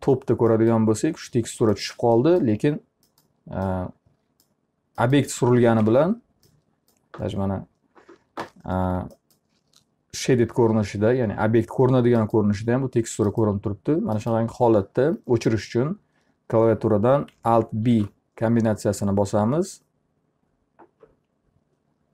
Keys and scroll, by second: 0.0-0.1 typing, 5.4 F3, 17.4 alt+b.